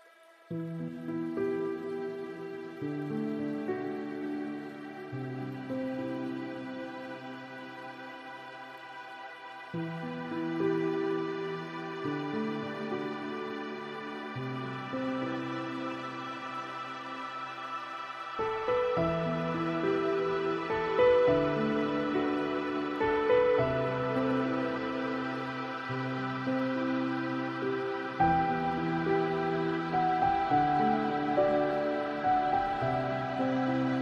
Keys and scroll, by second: 21.9 ctrl+space, 31.1 ctrl+space.